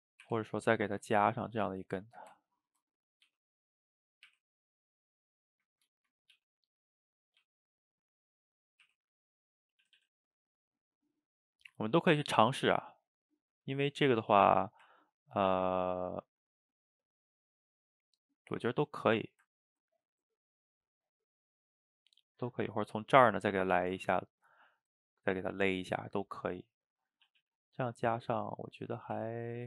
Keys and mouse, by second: 0.3 r, 1.3-3.3 middle drag, 3.3 g, 4.3 r, 5.2-6.3 middle drag, 6.3 g, 6.8 middle click, 7.4 g, 8.1 middle click, 8.9 r, 10.0 a, 10.1-11.4 middle drag, 11.4 drag, 11.8-12.1 middle drag, 12.1 r, 13.5 g, 14.3 a, 14.5 a, 14.6-18.4 middle drag, 18.5 click, 19.3 shift+right click, 19.5-27.3 ctrl+middle drag, 27.3 a, 27.4 a, 27.8 click, 28.0-29.2 middle drag, 29.2 r.